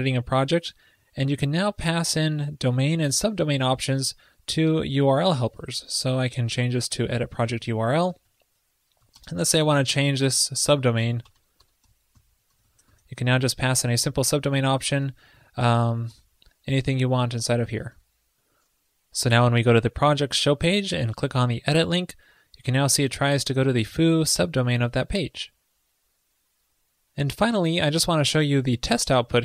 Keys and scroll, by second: 8.2 alt+Right, 8.3 alt+Right, 13.0 ctrl+i, 18.0 super+s.